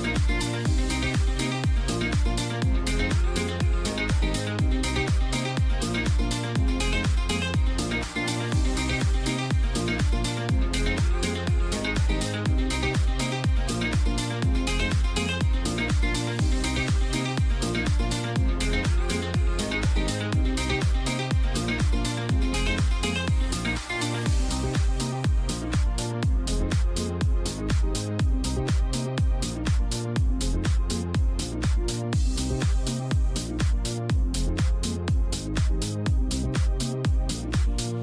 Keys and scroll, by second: 24.7 ctrl+t.